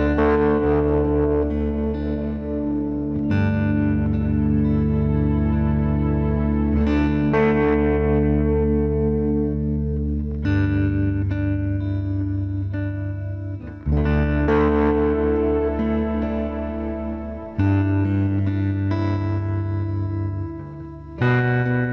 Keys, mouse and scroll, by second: 0.0 g, 1.5 b, 1.9 g, 4.1-5.8 right drag, 4.3 b, 4.7 g, 6.0 b, 6.5 g, 8.7-11.4 middle drag, 12.0 right click, 12.2 b, 12.8 click, 12.8 g, 16.3 ctrl+z, 16.5 ctrl+z, 16.7 ctrl+z, 16.9-18.9 middle drag, 17.2 ctrl+z, 17.5-18.0 ctrl+z, 18.2 ctrl+z, 18.4 ctrl+z, 18.5 ctrl+z, 18.7 ctrl+z, 18.9 ctrl+z, 19.1 ctrl+z, 19.3 ctrl+z, 19.6 ctrl+z, 19.8 ctrl+z, 20.0 ctrl+z, 20.4 ctrl+z, 20.7 ctrl+z.